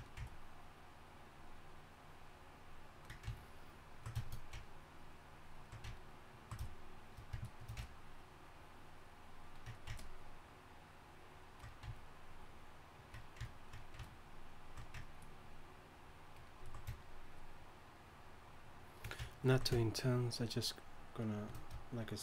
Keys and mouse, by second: 15.0-22.2 drag.